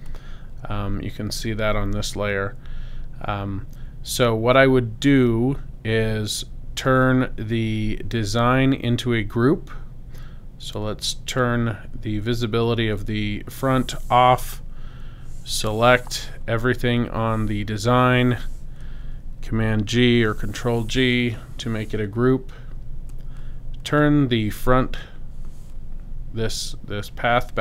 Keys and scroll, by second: 19.4 super+g.